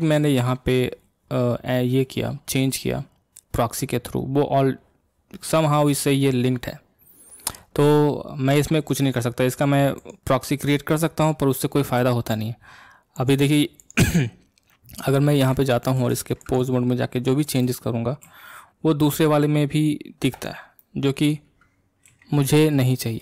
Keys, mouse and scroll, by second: 10.0 click, 13.2 click, 13.8 click, 16.1 ctrl+Tab, 16.4 ctrl+click, 17.4 click, 18.3 r, 20.8-22.0 middle drag, 22.0 a.